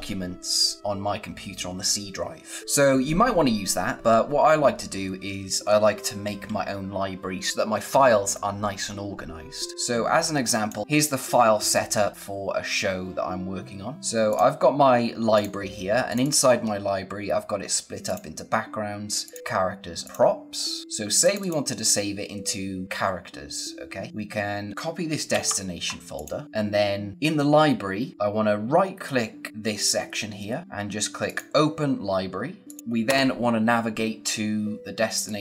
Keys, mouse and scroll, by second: 9.7 click, 13.9 click, 21.1 click, 24.1 click, 25.2 ctrl+c, 26.1 click, 26.6-27.3 scroll down 1, 29.6-30.1 scroll up 1, 30.3-30.6 scroll down 1, 30.6 right click, 31.2 click, 32.8 v, 33.0 Return, 35.2 click.